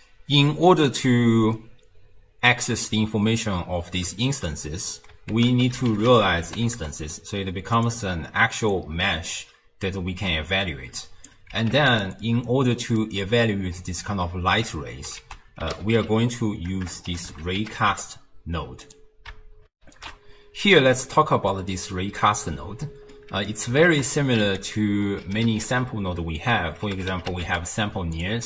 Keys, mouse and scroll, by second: 4.5 click, 5.3 ctrl+a, 11.0 click, 11.6 g, 12.2-15.2 middle drag, 15.2 ctrl+a, 16.9 BackSpace, 19.7 ctrl+alt+shift+w, 20.1 ctrl+alt+shift+q, 21.5-23.9 middle drag, 23.9 ctrl+a.